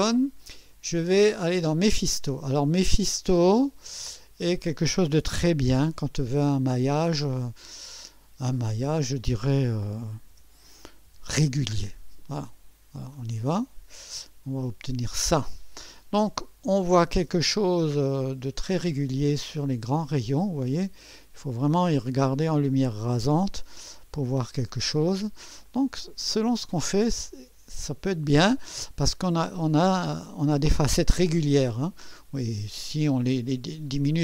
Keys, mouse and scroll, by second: 1.6 click, 3.4 click, 8.6 2, 10.3 BackSpace, 11.1 5, 13.1 click, 16.9-24.0 drag, 24.4 scroll up 1, 25.6-28.4 drag.